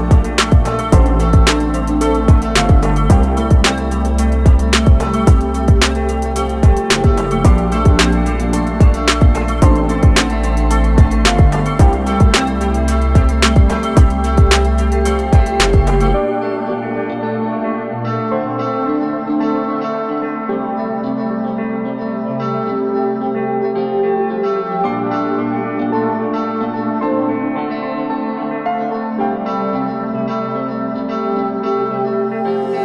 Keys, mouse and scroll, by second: 1.4 click, 10.0 a, 10.3 click, 17.5 a, 17.7 click, 19.5 i, 19.7 click, 23.8 click, 25.3 ctrl+z, 26.4 ctrl+z, 27.7 click.